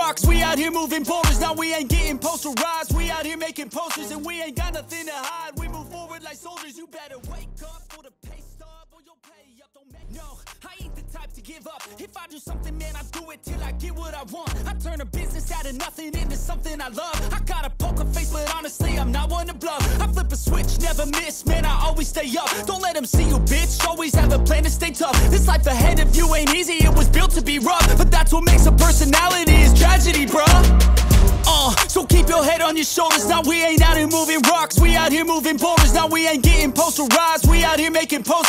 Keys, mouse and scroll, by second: 0.9 double click, 3.2 right click, 9.7 right click, 10.4 double click, 19.0 right click, 20.7-21.7 scroll up 1, 23.0-23.4 scroll up 1, 24.4 ctrl+z, 25.8 ctrl+z, 26.4 alt+space, 26.5 alt+click, 26.9 ctrl+space, 27.0 ctrl+click, 36.1 double click.